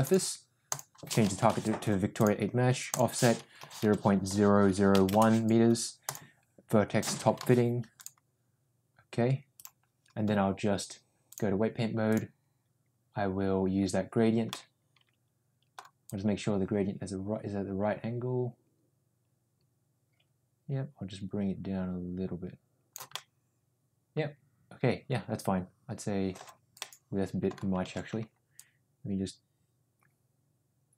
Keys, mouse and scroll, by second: 0.6-2.4 drag, 3.0-5.6 drag, 6.0-9.6 drag, 11.2 click, 14.4-15.7 middle drag, 16.0-22.9 drag, 23.1-26.4 middle drag, 26.7 middle click, 28.1 ctrl+z, 28.6-30.9 drag.